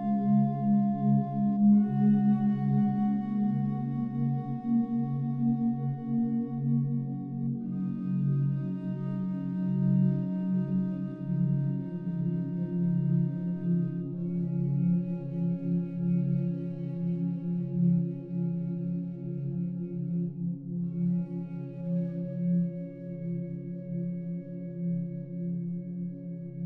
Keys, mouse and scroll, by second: 2.2-13.3 drag, 15.6-18.2 drag, 18.2 shift+d, 19.8 y, 23.8-26.6 drag.